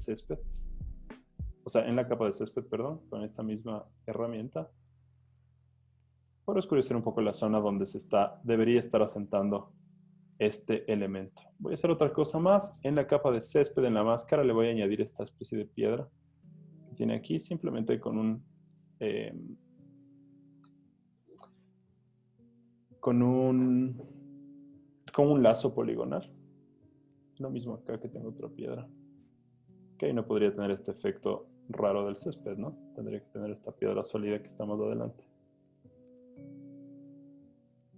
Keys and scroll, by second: 0.7 super+z, 6.7-7.5 typing, 8.7 z, 10.5 z, 12.2 |, 20.7 alt+BackSpace, 21.5 super+d, 21.8 z, 23.1 z, 26.9 z, 28.1 i, 33.9 alt+BackSpace, 34.7 super+d.